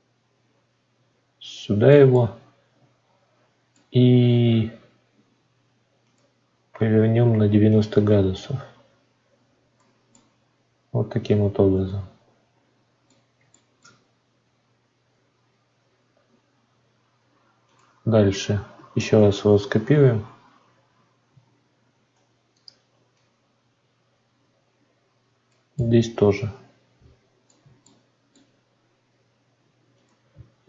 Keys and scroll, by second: 19.3 ctrl+d, 21.8 shift+d.